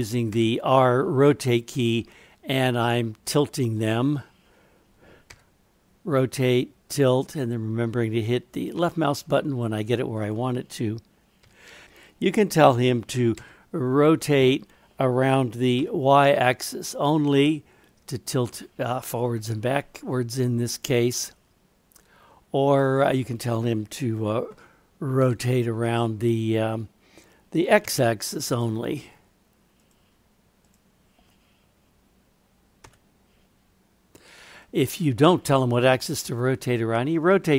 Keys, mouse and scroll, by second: 0.3 r, 3.8 click, 5.3 r, 10.2 click, 11.4 r, 13.3 r, 22.6 click, 25.2 r, 30.6 click, 32.8 r, 36.2-37.5 middle drag.